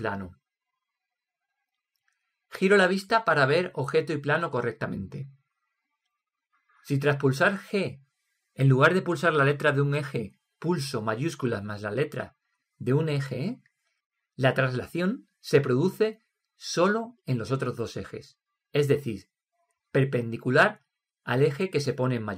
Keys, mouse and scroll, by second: 1.4-7.8 middle drag, 8.8 g.